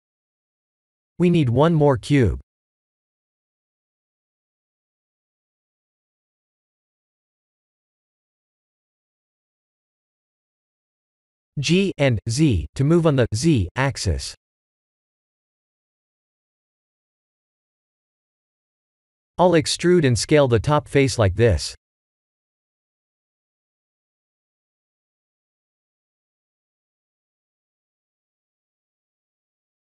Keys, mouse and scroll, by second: 0.6 click, 2.1 shift+a, 8.6 g, 11.8 ctrl+z, 12.3 g, 20.9 middle click, 21.5 Tab, 21.7 3, 21.9 click, 22.5 middle click, 23.3 KP_1, 24.0 e, 25.6 click, 25.9 s, 26.8 e, 29.2 s.